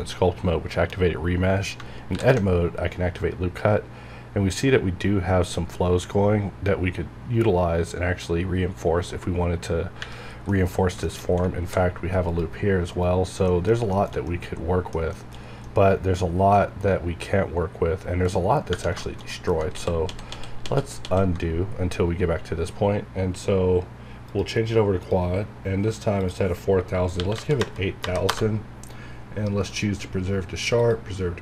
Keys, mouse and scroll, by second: 1.8 ctrl+Num_Lock, 1.8-2.1 scroll up 1, 2.1 ctrl+t, 10.2 scroll down 1, 10.5 middle click, 11.2 shift+scroll up 1, 11.6 ctrl+r, 12.3 click, 12.9 right click, 13.2 scroll down 1, 13.5 middle click, 13.9 shift+middle click, 15.1 shift+middle click, 15.6 scroll down 1, 15.6 middle click, 16.2 scroll up 1, 16.5-18.2 middle drag, 18.7 scroll down 1, 19.0 shift+middle click, 20.3 ctrl+z, 24.3 click, 27.2 KP_8, 28.3 KP_Enter, 29.7 click.